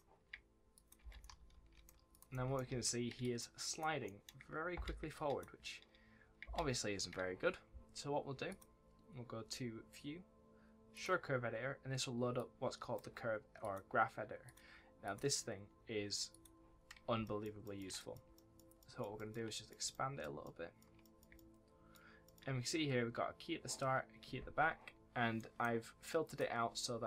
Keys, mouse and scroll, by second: 0.7 click, 0.9-2.2 typing, 1.1 right click, 2.0 click, 3.1 click, 4.0 right click, 4.7 space, 5.0 click, 6.4 space, 8.4 click, 10.8 click, 16.7-17.1 scroll down 1, 17.2 shift+middle click, 17.9 middle click, 18.3 shift+middle click, 19.4 middle click, 19.8 shift+middle click, 20.9 middle click, 21.3 shift+middle click, 22.2 middle click, 25.3 middle click, 26.2 click.